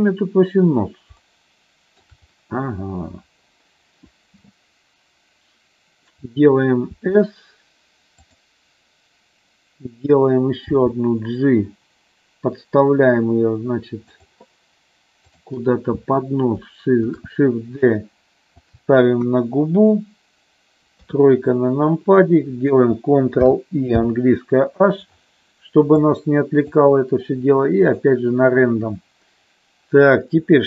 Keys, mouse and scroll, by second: 0.6 click, 1.2 shift+middle click, 6.9 s, 10.8 g, 14.0 click, 17.2 shift+d, 18.6 click, 19.3 KP_1, 20.9 KP_3, 23.4 ctrl+i, 24.0 h, 25.9 click, 27.9 click.